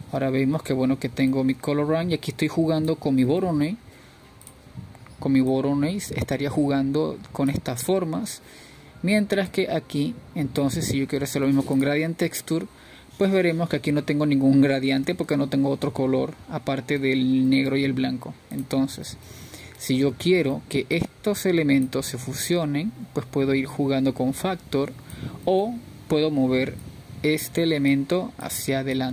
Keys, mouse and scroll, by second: 2.2-7.9 drag, 8.9-15.2 drag, 16.2-16.9 scroll down 4, 18.6-21.9 middle drag, 21.9 ctrl+shift+click, 24.2-29.1 drag.